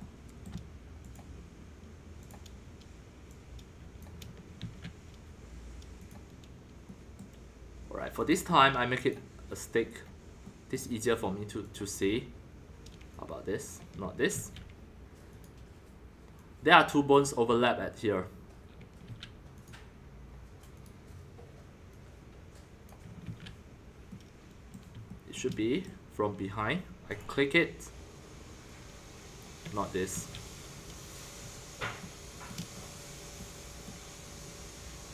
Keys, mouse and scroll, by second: 1.1-4.6 drag, 4.6 ctrl+z, 6.0 middle click, 6.1-7.2 drag, 6.9 middle click, 8.0 middle click, 8.3-9.6 drag, 9.7 click, 9.8-10.4 scroll up 1, 10.4-11.6 middle drag, 11.7-14.3 drag, 14.3 ctrl+z, 15.3 click, 16.3 click, 17.2-19.0 drag, 19.0 ctrl+z, 19.6-23.2 drag, 23.2 ctrl+z, 24.0-27.2 middle drag, 27.2-29.8 drag, 30.1 ctrl+z, 30.4-30.9 scroll, 31.4 scroll, 31.8-33.8 shift+middle drag, 34.4-35.1 middle drag.